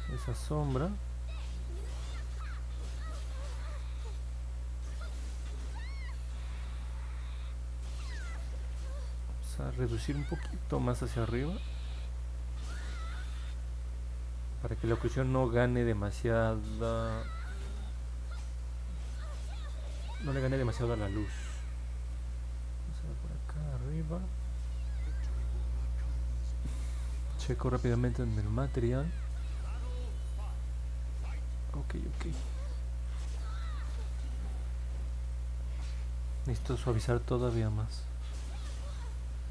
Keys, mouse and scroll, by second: 0.6 click, 1.3 click, 1.8 click, 2.4 click, 3.6 click, 4.2 click, 5.7 click, 6.1 click, 6.9 click, 7.3 click, 7.6 click, 7.9 click, 8.2 click, 9.6 click, 10.1 click, 11.0 click, 11.4 click, 12.1 click, 12.3 click, 12.8 click, 13.2 click, 13.6 click, 14.0 click, 14.2 click, 15.8 click, 16.3 click, 16.9 click, 17.4 click, 17.9 click, 18.8 click, 19.4 click, 20.0 click, 21.6 click, 22.8 click, 23.2 click, 23.8 click, 24.9 middle click, 24.9-25.4 scroll down 2, 25.7 scroll up 1, 28.0 click, 29.0 click, 30.0-32.3 alt+drag, 33.0 click, 34.1 click, 34.6 middle click, 35.3 alt+click, 38.8 click.